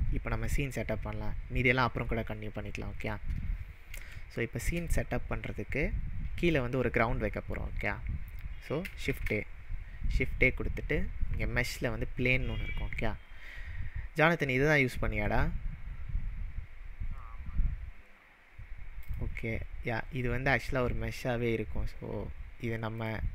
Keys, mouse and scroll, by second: 3.7 shift+middle click, 3.8-4.2 scroll down 3, 4.2-4.7 shift+middle drag, 4.9 drag, 8.8 click, 9.1 shift+a, 19.0 click, 23.0 click.